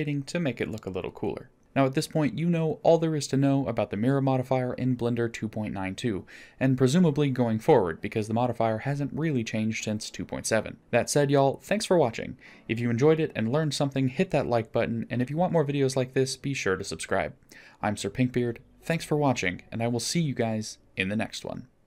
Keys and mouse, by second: 3.3-4.6 middle drag, 14.1 middle click, 19.2-19.6 middle drag.